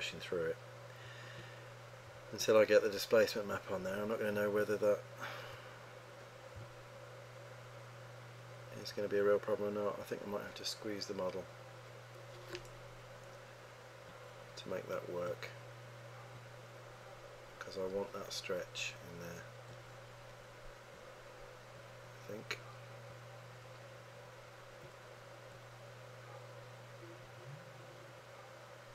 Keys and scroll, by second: 1.2 1, 2.4 2, 4.5 3, 6.7 3.